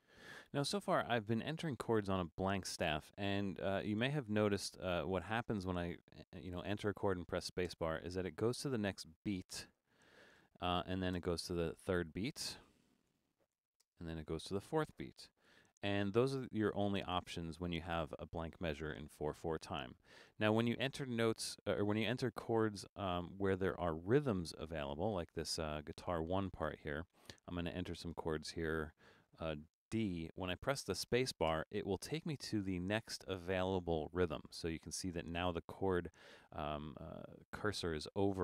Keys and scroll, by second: 6.7-7.7 typing, 9.9-11.1 typing, 12.8-14.1 typing, 15.4 shift+g, 30.1 shift+d, 31.5 space.